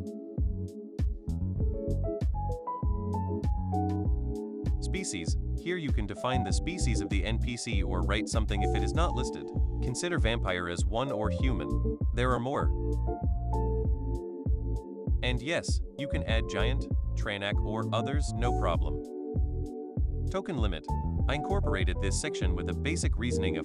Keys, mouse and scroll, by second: 0.0-1.7 typing, 3.6 click, 4.8 click, 6.4 click, 8.0-12.3 drag, 15.0-16.9 drag, 17.4 click, 18.8 click, 19.9 click.